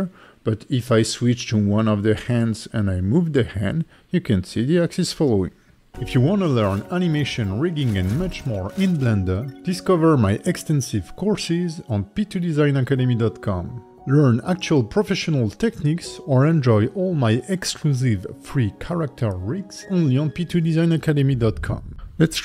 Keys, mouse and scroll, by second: 0.8 click, 1.2 click, 2.5 click, 3.6 click, 4.9 click, 5.4 g.